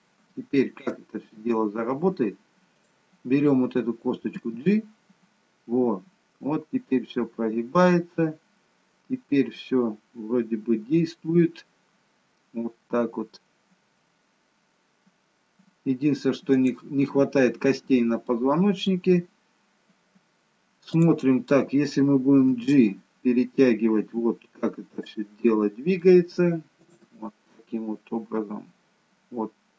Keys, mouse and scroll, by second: 0.4 shift+middle click, 0.6 shift+middle click, 1.4 scroll down 1, 2.7 click, 4.4 g, 17.8-18.2 scroll up 2, 18.2 middle click, 21.3 click, 22.5 g, 25.4 middle click, 26.8 click, 27.0 g.